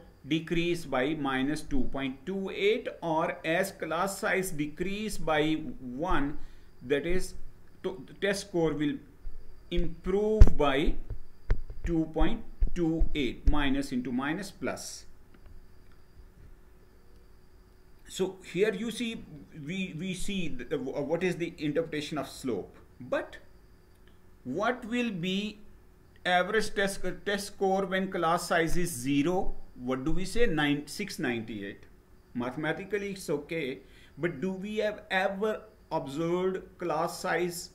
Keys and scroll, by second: 15.7 Page_Down.